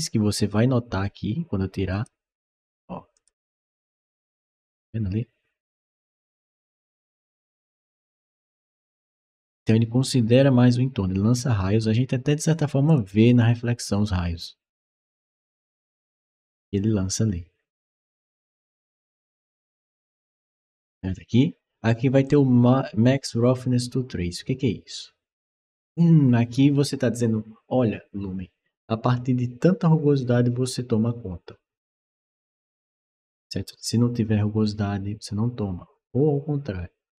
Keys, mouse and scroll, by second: 1.7 click, 3.0 click, 3.8 click, 7.7 click, 8.8 click, 12.7 click, 15.8 click, 22.1 click.